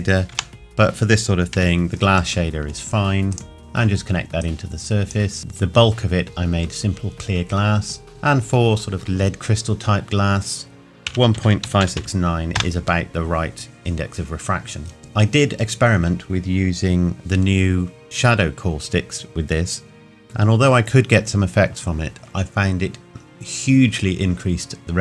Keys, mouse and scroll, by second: 0.3 Delete, 1.8-3.3 scroll up 1, 3.3 click, 8.1 click, 11.0 KP_1, 11.3 KP_Decimal.